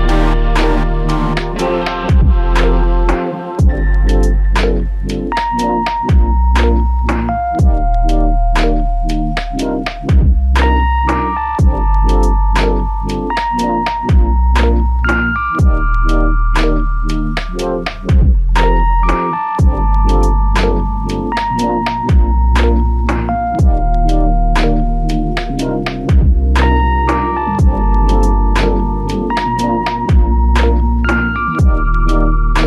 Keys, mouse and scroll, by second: 0.9 alt+click, 2.2 ctrl+click, 4.7 ctrl+click, 5.9 double click, 7.1 shift+click, 12.3 double click, 21.6 alt+shift+click, 22.6 alt+click, 24.2 double click, 30.7 shift+click.